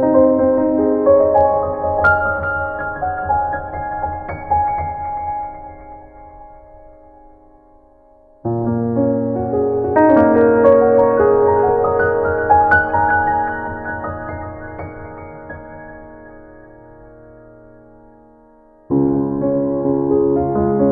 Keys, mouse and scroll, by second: 7.0 scroll up 3, 7.7 click, 8.9 scroll up 1.